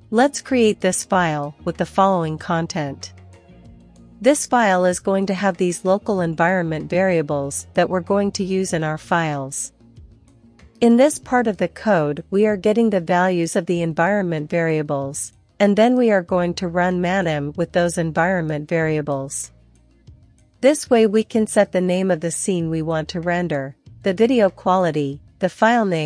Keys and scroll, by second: 0.7-1.9 typing, 3.2-3.9 typing, 5.4 Escape, 5.5 Escape, 5.8 typing, 7.2-8.1 typing, 9.0 Return.